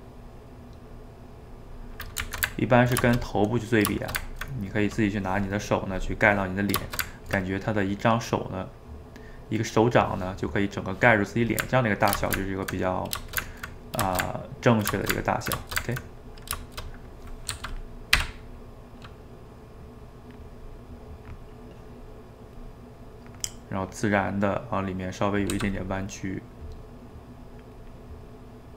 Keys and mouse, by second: 0.2 middle click, 0.9 click, 1.7-17.5 middle drag, 17.5 f, 18.2 d, 18.6 middle click, 19.3-20.9 drag, 20.9-22.0 middle drag, 22.0-23.4 drag, 23.4 middle click, 24.0-25.5 drag, 25.5 f, 26.1 middle click, 26.7 click, 27.2 middle click, 27.8-28.7 drag.